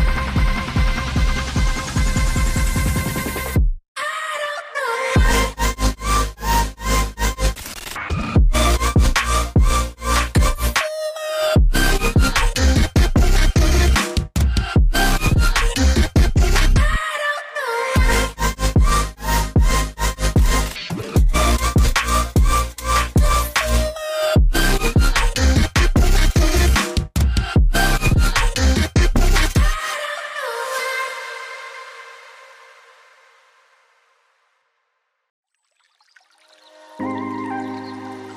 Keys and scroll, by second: 14.1 typing, 14.5 Return, 21.6 typing, 21.8 Return, 24.1-25.0 typing.